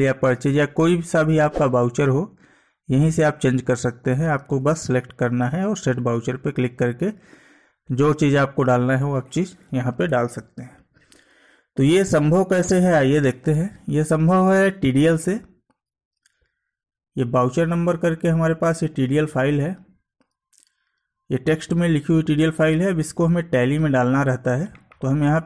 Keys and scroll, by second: 4.6 Down, 10.1 Escape, 12.0 Escape.